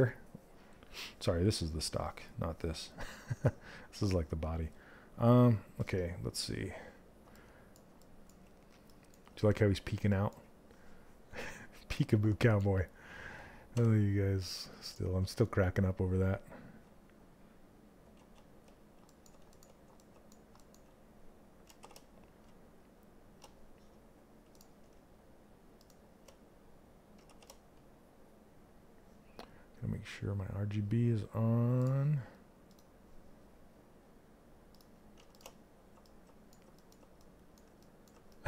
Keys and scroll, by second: 26.7 shift+f.